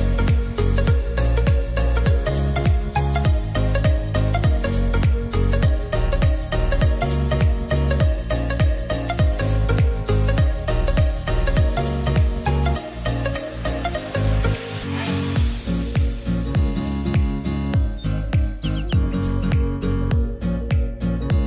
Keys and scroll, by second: 5.7 ctrl+s, 20.9 Delete.